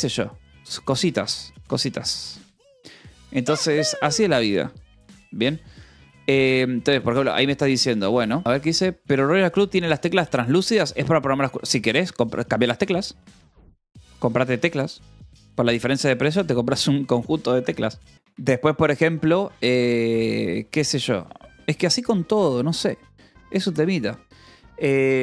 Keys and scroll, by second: 18.1 Delete, 18.8 BackSpace.